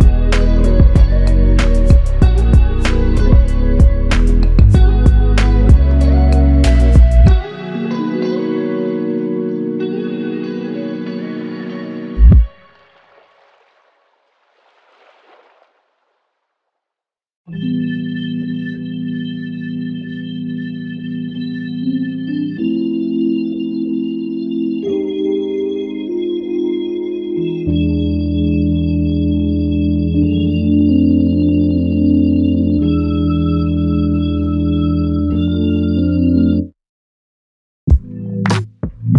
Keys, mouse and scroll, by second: 0.3 f, 1.3 double click, 10.0 ctrl+alt+click, 11.1 alt+click, 13.8 ctrl+alt+click, 14.8 f, 16.2 double click, 24.1 alt+click, 25.5 alt+click, 27.4 double click, 31.9 double click, 32.3 alt+click, 35.2 shift+click, 35.7 alt+shift+click, 38.4 double click.